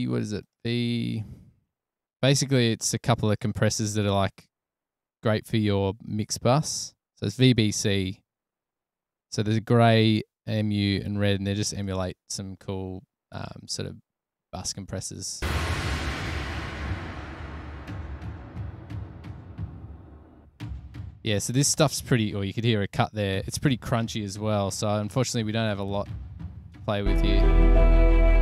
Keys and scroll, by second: 24.2 super+=.